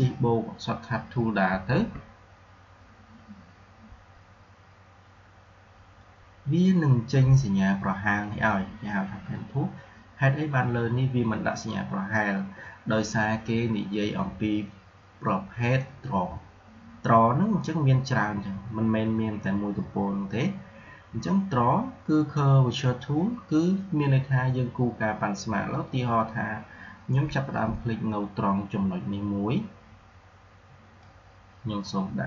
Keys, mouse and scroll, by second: 1.4 shift+`, 30.9-32.2 drag.